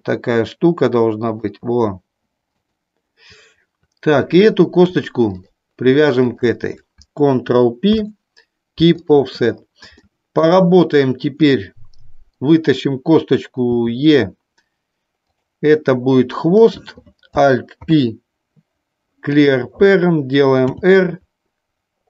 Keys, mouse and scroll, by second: 1.3 click, 2.6 click, 5.4 click, 6.4 shift+click, 7.9 ctrl+p, 10.0 shift+middle click, 11.4 click, 15.4 click, 17.9 alt+p, 20.7 r.